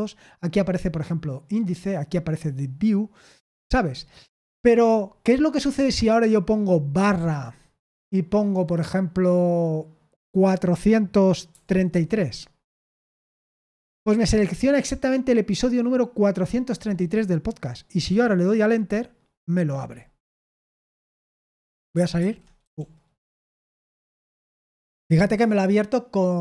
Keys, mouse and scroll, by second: 6.9 typing, 11.4-12.6 typing, 17.9 Return, 22.1-22.6 typing, 24.2 Return.